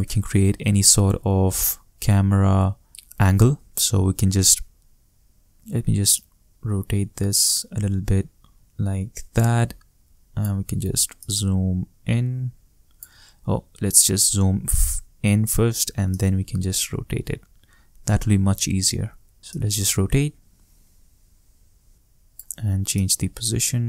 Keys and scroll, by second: 13.5 shift+super+z, 16.4 shift+super+z.